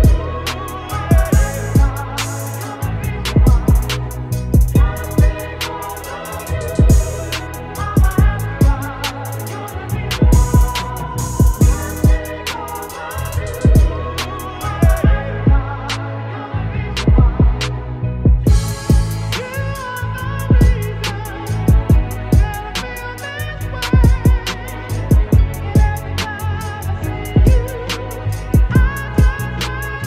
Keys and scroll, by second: 2.0 Return, 3.7 ctrl+shift+t, 4.2 ctrl+shift+t, 6.3 ctrl+shift+Return, 7.7 space, 28.8 ctrl+v.